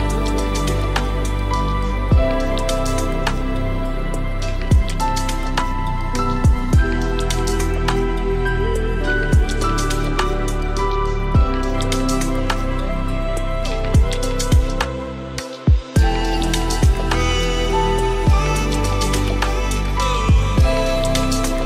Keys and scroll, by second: 1.6 ctrl+space.